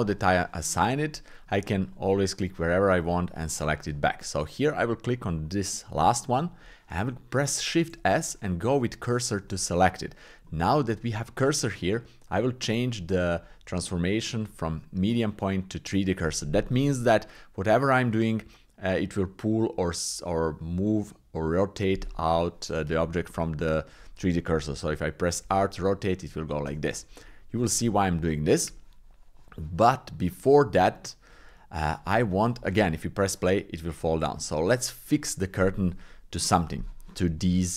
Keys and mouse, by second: 1.1 shift+click, 1.9-3.4 drag, 5.1 click, 6.1 shift+click, 7.9 shift+s, 10.5 shift+click, 13.4-15.9 drag, 23.3 Tab, 25.4 r, 27.3 shift+click, 27.7 middle click, 28.3 shift+middle click, 30.9 shift+middle click, 33.3 click, 34.0 click, 37.4 Tab.